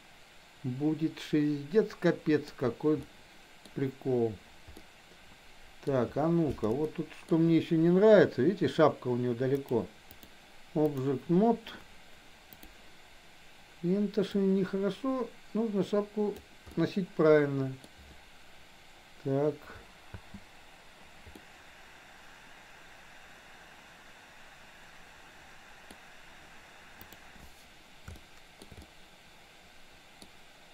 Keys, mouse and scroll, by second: 3.0-3.5 middle drag, 4.8-5.9 middle drag, 6.9-7.3 shift+middle drag, 9.7-10.3 drag, 10.9 click, 12.5 click, 14.4-16.5 drag, 16.8-17.9 middle drag, 16.8 scroll up 1, 17.8 scroll down 1, 20.2 space, 21.3-26.0 middle drag, 21.3 scroll up 1, 27.2 click, 28.2-28.7 shift+middle drag, 28.8-30.3 middle drag.